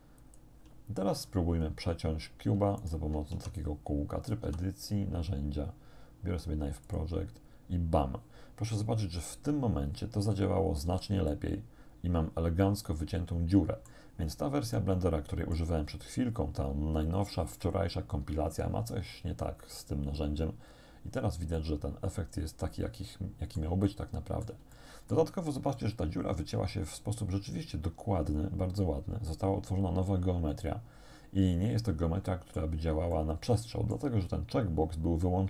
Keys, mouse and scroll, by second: 0.3 shift+click, 1.3-2.3 scroll up 2, 2.8 shift+right click, 3.4 shift+Tab, 4.5 t, 5.4-5.7 scroll down 2, 6.9 click, 10.9 z, 11.3-14.1 drag, 14.8-15.8 shift+drag, 20.7-21.4 scroll up 2, 21.6-23.8 drag, 24.8 shift+click, 25.5 shift+scroll down 1, 25.8-32.8 drag, 33.1-34.1 drag.